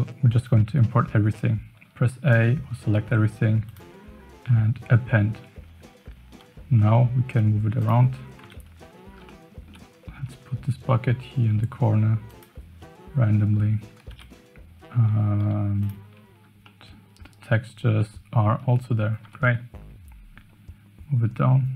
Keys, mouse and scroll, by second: 6.8 g, 8.4 KP_7, 9.3-9.7 shift+middle drag, 10.1 g, 12.8 KP_0, 14.1 KP_Decimal, 15.4 z, 16.6-17.0 middle drag, 17.0 click, 17.0 right click, 17.0 middle click, 18.1-18.6 middle drag, 19.2 g.